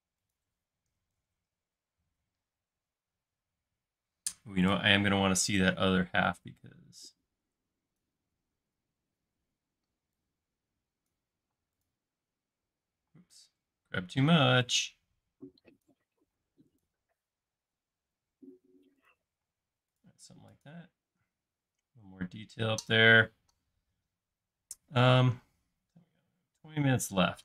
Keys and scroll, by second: 0.7-2.5 typing, 11.5 m, 13.1 space, 15.4-16.3 typing, 19.5 space.